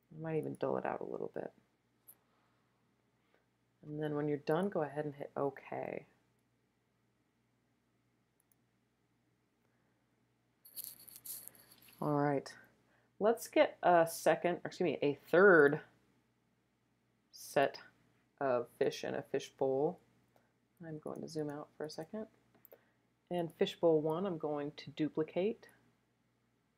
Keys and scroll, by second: 20.9 alt+super+space, 21.4 alt+super+space, 21.5 alt+super+space, 22.6 alt+super+space, 23.2 space.